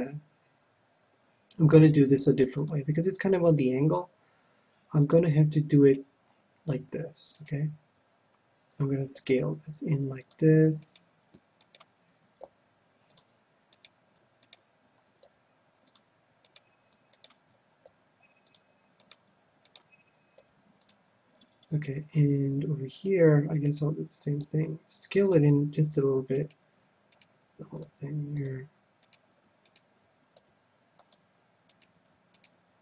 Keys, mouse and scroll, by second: 5.0-6.7 drag, 5.8-9.2 right drag, 9.2 s, 10.3-12.0 drag, 11.0-13.3 right drag, 12.4 s, 13.1-14.9 drag, 13.8-16.2 right drag, 15.2 s, 15.9-17.7 drag, 16.5-21.4 right drag, 16.5 s, 17.8 s, 18.5-20.4 drag, 20.4 s, 20.8-22.6 drag, 22.9-25.3 right drag, 24.4 s, 25.3-26.9 drag, 26.4-31.6 right drag, 27.8 s, 28.6-30.2 drag, 30.4 s, 31.2-32.8 drag, 31.7-32.8 right drag.